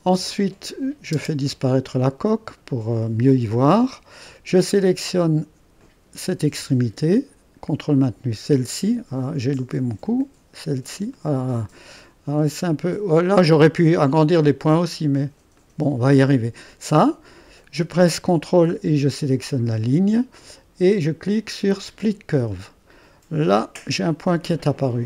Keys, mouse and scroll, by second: 1.1 space, 3.1 click, 3.8-5.7 scroll up 1, 5.7 click, 7.9 click, 10.0-13.9 drag, 15.6 click, 19.1-20.1 drag, 21.9-25.0 drag.